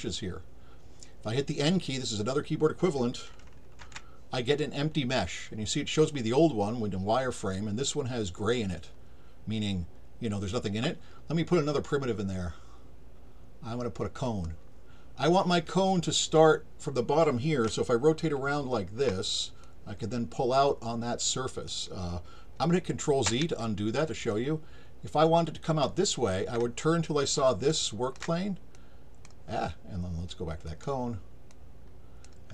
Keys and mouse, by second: 14.2 click, 17.7-19.0 alt+drag, 19.6-21.7 drag, 24.3-25.8 alt+drag, 27.8 alt+shift+click, 28.7-29.2 drag, 30.7 click, 31.5 click.